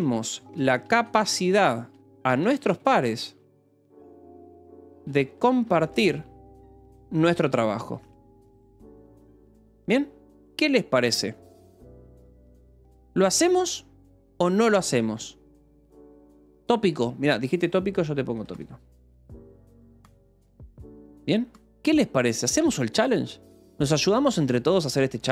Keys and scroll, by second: 0.0-9.6 typing, 15.2 k, 16.9-20.8 typing, 23.0 ctrl+s, 24.4-25.3 typing.